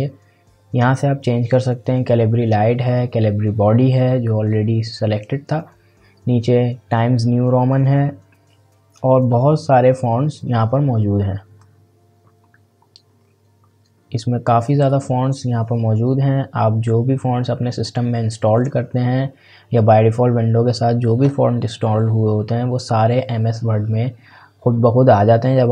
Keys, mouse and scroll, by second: 13.0-14.9 scroll down 1, 14.9-20.2 drag.